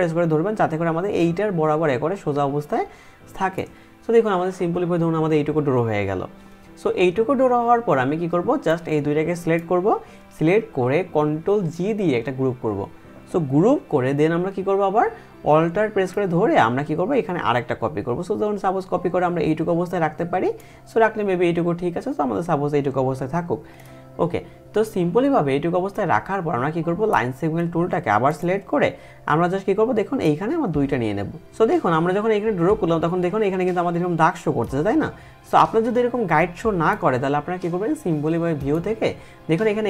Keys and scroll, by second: 11.1 ctrl+g.